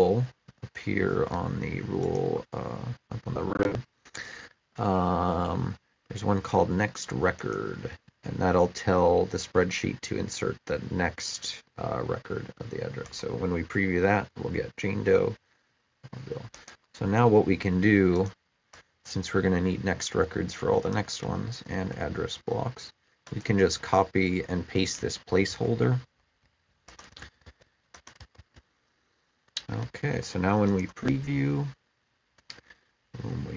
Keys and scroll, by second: 21.6 ctrl+c, 25.3-27.7 ctrl+v.